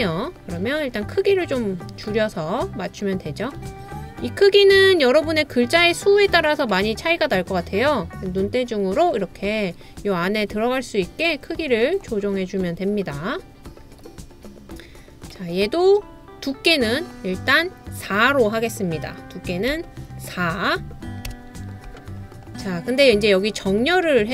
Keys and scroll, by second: 19.7 4, 21.3 Return, 21.4 Return.